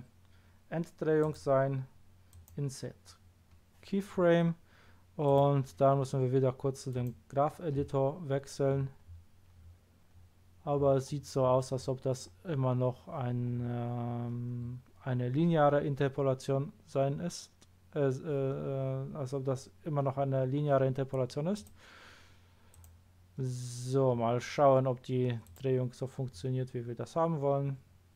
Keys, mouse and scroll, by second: 1.2 right click, 2.3 click, 5.3 click, 6.9 click, 8.3-9.5 scroll down 2, 9.5-10.7 scroll down 1, 10.7-11.9 scroll up 3, 12.2 scroll up 1, 14.5 scroll up 1, 21.5 click, 22.7 click, 25.4 click.